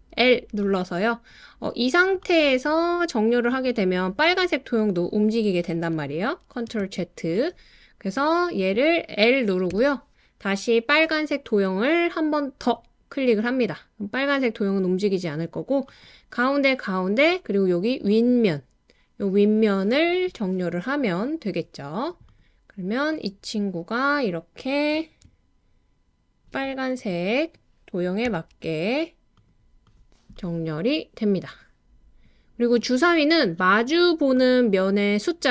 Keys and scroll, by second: 6.8 super+z, 9.7 i, 28.2 i.